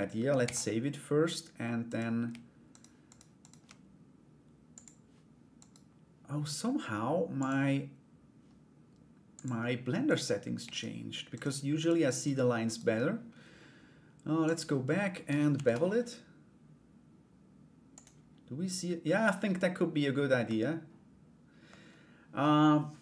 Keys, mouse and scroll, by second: 0.0 ctrl+s, 1.4 right click, 2.3 shift+right click, 2.6 shift+right click, 3.0 shift+right click, 4.3 click, 5.1 right click, 6.9 click, 8.9 click, 9.6 right click, 10.3 shift+right click, 10.9 shift+right click, 11.3 shift+right click, 12.2 shift+right click, 14.0 click, 15.1 ctrl+b, 20.0 Tab.